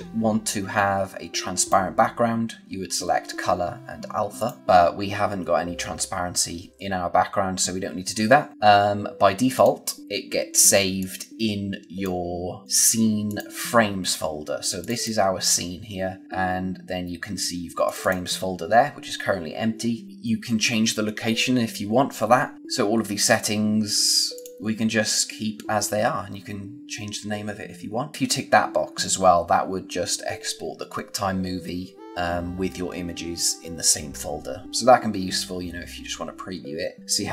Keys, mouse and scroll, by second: 1.5 click, 4.3 click, 8.5 click, 9.5 click, 10.9 click, 17.8 click, 24.3 click.